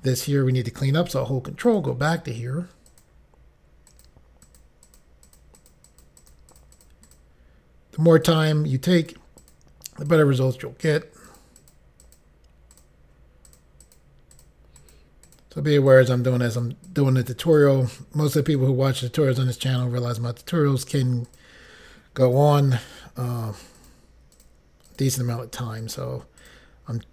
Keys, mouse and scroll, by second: 1.8 ctrl+click, 3.0 click, 4.0 click, 5.0 click, 5.4 click, 5.5 double click, 5.7 click, 6.0 click, 6.1 double click, 6.3 double click, 6.6 double click, 6.7 double click, 6.9 double click, 7.2 double click, 7.3 double click, 9.1 click, 9.5 click, 10.2 click, 10.9 click, 11.4 click, 11.5 double click, 11.7 click, 11.8 double click, 12.1 double click, 12.3 double click, 12.8 double click, 13.6 double click, 13.9 click, 14.5 double click, 14.9 click, 15.4 double click, 15.5 double click, 16.0 double click, 16.1 double click, 16.7 double click, 17.0 click, 17.7 click, 18.6 click, 19.8 click, 21.4 click, 23.9 click, 24.5 click, 25.0 click, 25.9 click, 26.5 click.